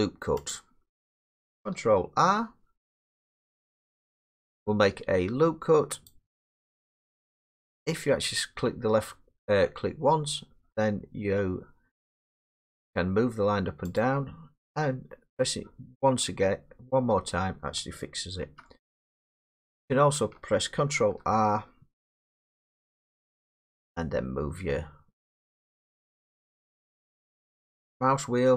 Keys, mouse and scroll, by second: 0.5 click, 3.5 ctrl+r, 6.1 click, 14.0 click, 17.2 middle click, 18.4 ctrl+z, 19.6 click, 21.0 ctrl+r, 21.1 scroll, 23.8-24.7 scroll, 24.7-27.9 scroll.